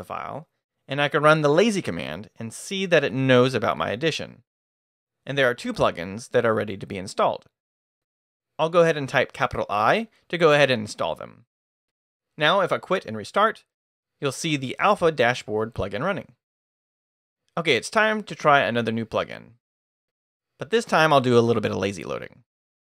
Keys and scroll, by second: 1.3-2.7 typing, 8.4 shift+i, 12.6-14.2 typing, 13.2 Escape, 15.3 Return, 21.5 shift+;.